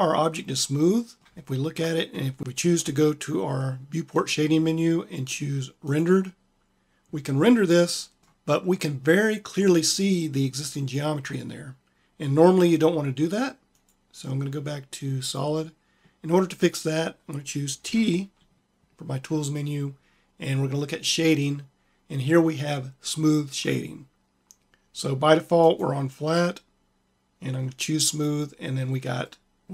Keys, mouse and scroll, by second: 17.8 t, 29.2 click, 29.4 middle click.